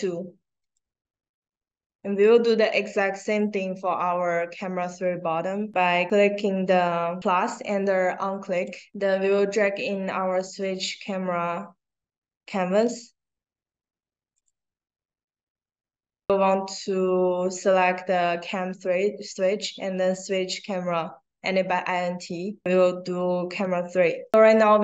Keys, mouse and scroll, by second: 0.6 click, 3.2 click, 7.2 click, 9.0-12.7 drag, 14.3 click, 24.2 click.